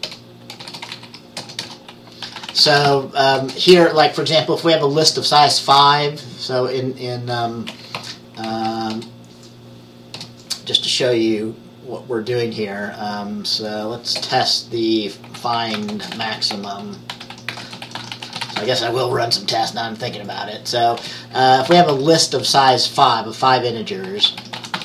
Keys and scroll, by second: 0.0-3.5 typing, 8.1 Down, 8.6 Down, 9.0 Return, 10.3 Return, 15.1-19.2 typing, 21.1-22.6 typing, 24.2-24.8 typing.